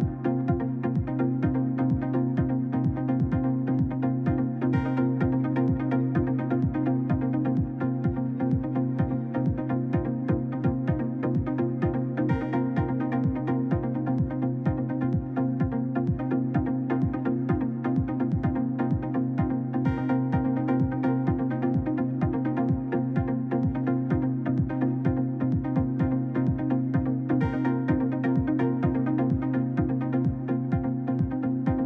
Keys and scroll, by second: 30.1 5, 30.4 Return.